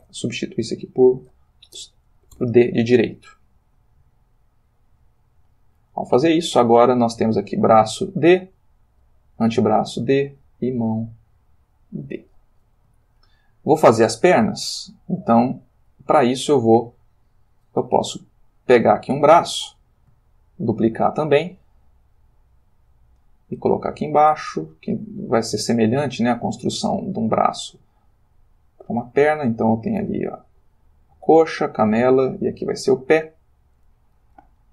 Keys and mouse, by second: 1.7 BackSpace, 2.3 shift+d, 4.6 click, 7.2 click, 9.0 click, 11.4 click, 13.0 shift+middle click, 17.5 click, 18.2 shift+click, 18.9 shift+click, 20.7 shift+d, 23.6 click, 24.2 click, 24.6 g, 26.0 click, 26.7 click, 26.8 g, 28.9 click, 29.4 click, 29.6 g, 31.0 click, 31.4 click, 31.8 g, 33.6 click, 34.6 ctrl+middle click.